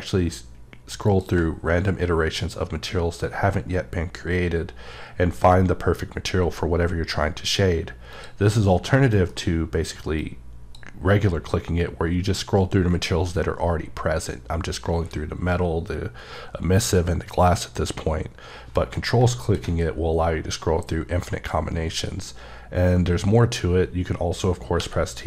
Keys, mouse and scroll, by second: 1.0 click, 1.5-4.4 scroll up 24, 4.6-5.7 scroll up 5, 6.3-7.0 scroll up 4, 7.4-8.1 scroll up 1, 8.1 click, 9.1 m, 10.2 click, 11.2-13.7 scroll up 14, 14.4-15.0 scroll up 5, 15.4-17.7 scroll up 5, 17.7 scroll up 1, 17.8 right click, 18.8 alt+m, 19.4 ctrl+click, 19.8-21.3 scroll up 10, 21.7-22.2 scroll up 1, 22.2-23.0 scroll up 5, 23.2-24.4 scroll up 3, 24.7 t.